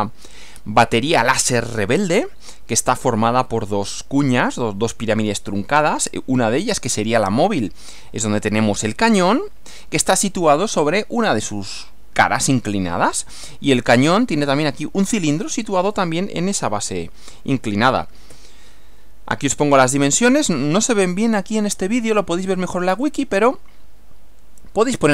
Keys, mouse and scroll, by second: 18.3 Right, 21.1-22.1 scroll up 4.